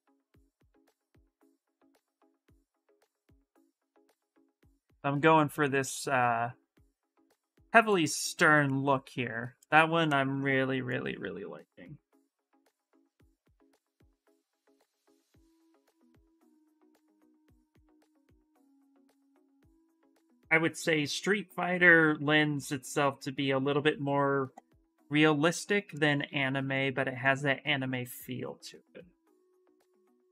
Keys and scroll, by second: 12.8 s, 18.0 s, 30.0 shift+d, 30.2 shift+d.